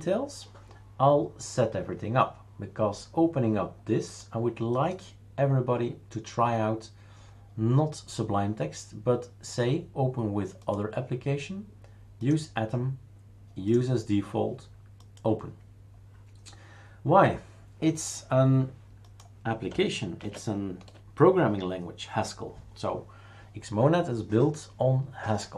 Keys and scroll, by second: 20.2 shift+super+q.